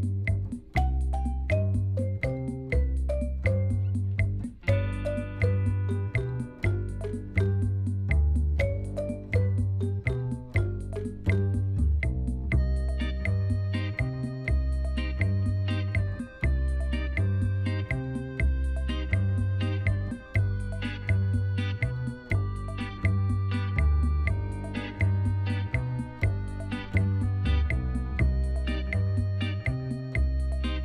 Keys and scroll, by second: 3.0 1, 3.3 shift+z, 4.6 shift+z, 5.9 Tab, 12.2 Tab.